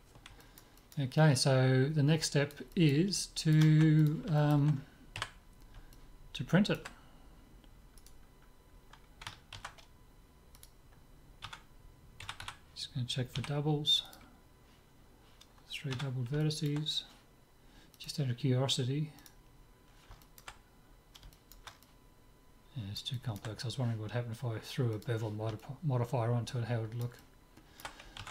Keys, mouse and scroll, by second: 0.4-4.0 middle drag, 4.0-5.8 drag, 5.2 KP_5, 5.8-7.8 middle drag, 8.0-10.0 right drag, 9.6 ctrl+a, 11.5 Tab, 12.3 a, 12.5 a, 13.4 w, 15.9 Tab, 16.4-18.0 middle drag, 18.0-19.7 drag, 20.2-25.1 middle drag, 25.0-26.7 drag, 25.6-28.3 middle drag.